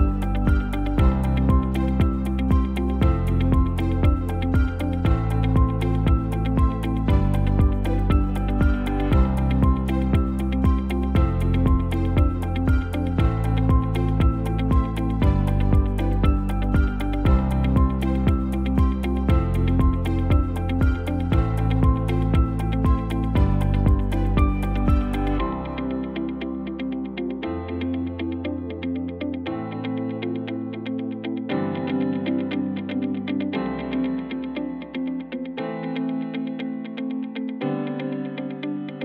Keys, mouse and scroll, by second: 14.1 Tab, 14.7 alt+shift+z, 17.3 alt+s, 19.9 Tab, 28.4 Tab, 29.5 alt+s, 33.9 alt+s, 35.3 Tab.